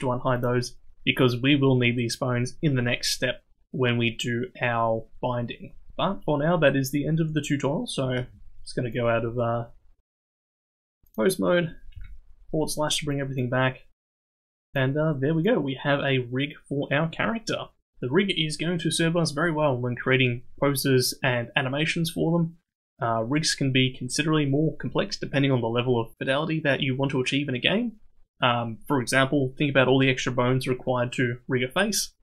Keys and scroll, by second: 8.1 ctrl+Tab, 12.0 /, 14.3 ctrl+Tab.